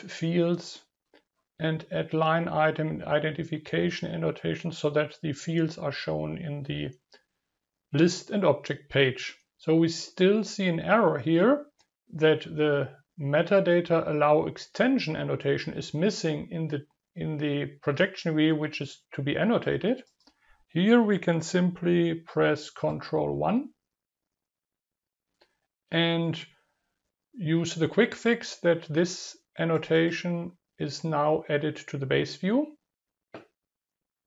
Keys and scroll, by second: 20.8 ctrl+KP_1.